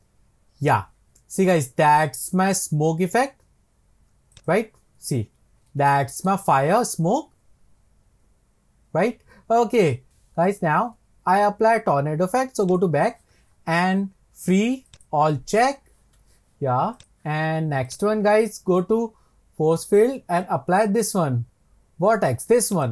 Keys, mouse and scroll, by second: 4.4 click, 5.0 scroll down 1, 5.1 scroll up 2, 5.9-10.2 shift+middle drag, 12.7-17.1 drag, 17.9-21.0 drag.